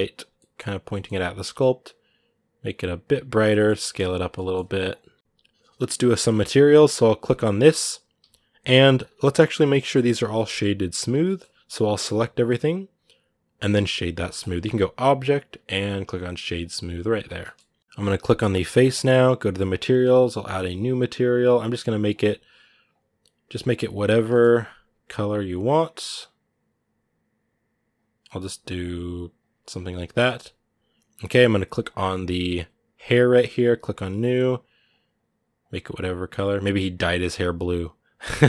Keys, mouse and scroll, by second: 0.1-1.4 middle drag, 1.4-3.2 drag, 3.2 scroll down 2, 3.3 middle click, 3.5 s, 4.1 middle click, 4.4 g, 5.2-7.0 shift+middle drag, 7.0-8.1 right drag, 8.1 z, 9.5-11.8 shift+middle drag, 11.8 a, 16.5 click, 16.8 a, 17.0 scroll down 1, 17.2 shift+middle click, 17.8-20.7 right drag, 20.7-22.7 drag, 24.1 shift+middle click, 25.0 click, 29.9 shift+middle click, 30.2-30.7 scroll up 1, 31.6-33.5 right drag, 33.5 click.